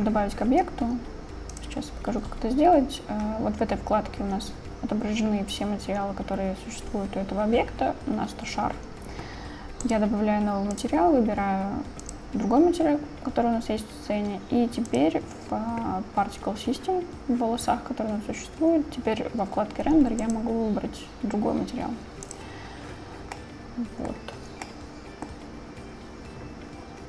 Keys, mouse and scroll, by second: 10.5-13.3 drag, 20.5-22.5 drag, 23.4-24.5 middle drag, 24.7-25.7 middle drag.